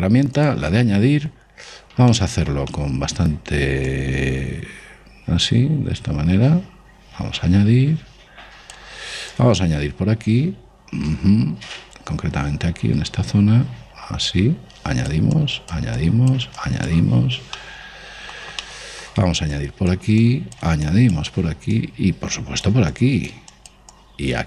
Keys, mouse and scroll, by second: 2.6-5.1 middle drag, 4.4 click, 9.8 click, 15.9-18.9 drag, 17.7 middle click, 18.6-21.1 middle drag, 20.1-24.4 drag.